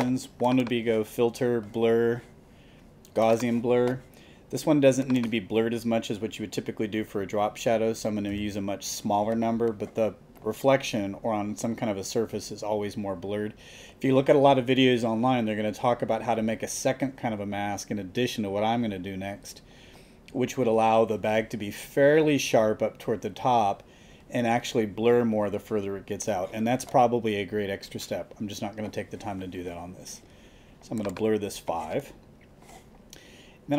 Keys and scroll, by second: 8.3 5.